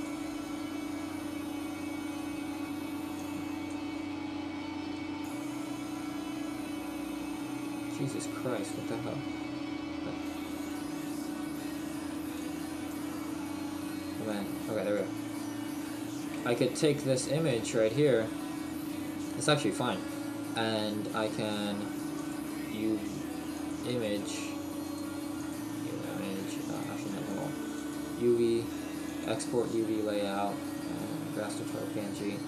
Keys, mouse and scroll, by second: 0.0 click, 3.3 click, 12.5 click.